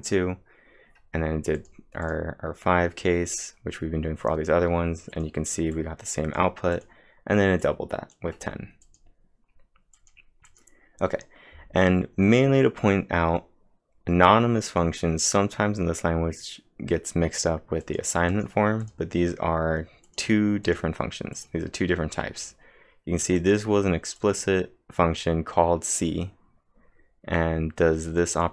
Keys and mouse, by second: 1.3-2.1 typing, 1.6 click, 5.1-7.6 drag, 7.6-10.0 drag, 10.0 click, 10.5-14.0 drag, 14.7 click, 17.6-18.3 typing, 17.8 click, 21.4 click, 28.2-28.5 typing, 28.4-28.5 click.